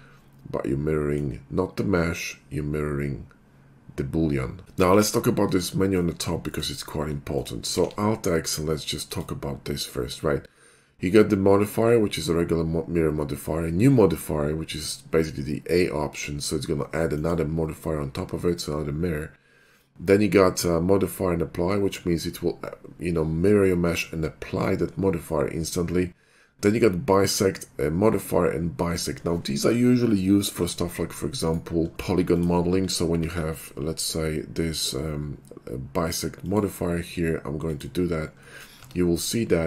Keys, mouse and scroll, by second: 4.6 2, 4.9 x, 5.0 click, 5.9-6.3 middle drag, 6.5 shift+middle click, 7.3 click, 7.8 alt+x, 9.1 click, 17.2 click, 31.5 right click, 32.0 shift+middle click, 32.3 click, 33.3 alt+x, 34.8 click, 36.5 click, 37.7 click, 38.6 middle click, 38.9 Tab, 39.4 middle click.